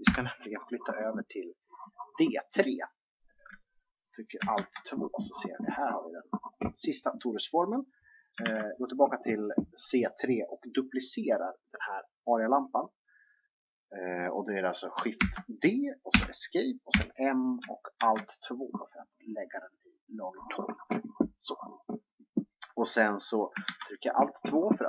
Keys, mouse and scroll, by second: 0.0 Escape, 4.5 alt+2, 8.4 alt+1, 15.1 shift+d, 16.9 m, 23.6 alt+2.